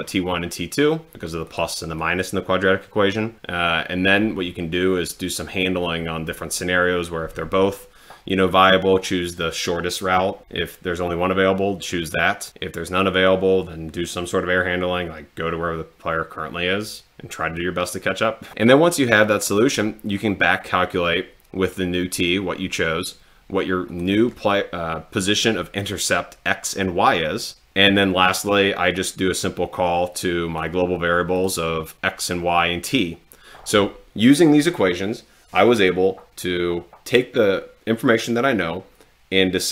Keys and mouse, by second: 1.5 click, 2.0 click, 23.9 click, 29.4-30.7 drag, 31.4 click.